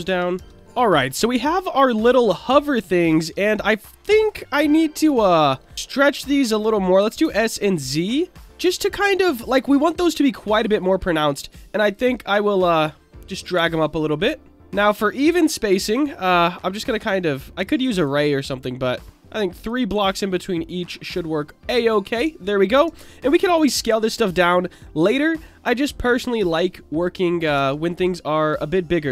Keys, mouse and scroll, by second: 0.0 Tab, 0.3 Tab, 0.9-1.7 middle drag, 3.0 alt+middle drag, 3.5-4.0 middle drag, 4.2 alt+middle drag, 4.4 alt+middle drag, 5.2-5.5 shift+middle drag, 7.0 s, 7.2 z, 9.1 click, 9.9 click, 10.8 click, 11.9 click, 12.6 click, 13.7 alt+middle click, 13.9 alt+middle drag, 14.3 alt+middle click, 14.5 shift+middle drag, 16.4-17.6 drag, 17.9 click, 19.6 click, 20.3 click, 22.2 Tab, 22.8 Tab, 23.7 click, 24.3-27.2 middle drag, 27.5 Tab, 28.7 middle click.